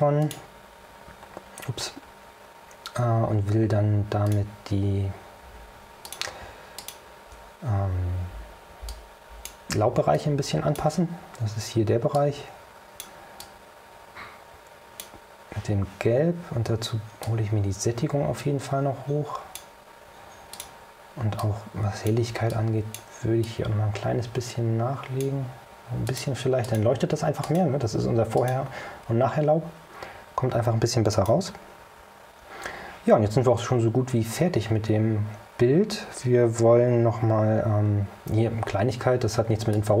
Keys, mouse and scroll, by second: 0.3 click, 1.4-2.2 scroll up 4, 4.4 click, 6.2 click, 6.9 ctrl+click, 9.0 click, 10.2-11.1 drag, 12.2 click, 13.5-15.3 drag, 17.3-19.9 drag, 20.7 click, 21.5 click, 22.6 click, 23.5 click, 26.2 click, 26.7 click, 27.5 click, 28.5 click, 31.2 click, 39.1-39.8 scroll up 4, 39.8-40.0 drag.